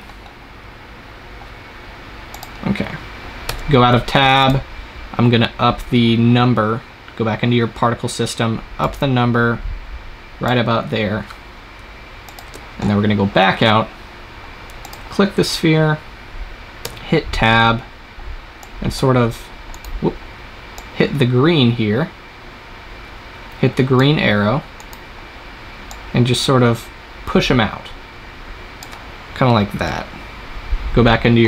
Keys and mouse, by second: 0.6-2.3 middle drag, 2.3 click, 3.4 Tab, 5.9 middle click, 6.1 click, 6.9-8.7 middle drag, 8.7-10.7 drag, 12.1-13.6 drag, 12.3 KP_0, 16.8 Tab, 20.1 click, 20.8-22.5 drag, 25.9-27.7 drag, 29.8 KP_0.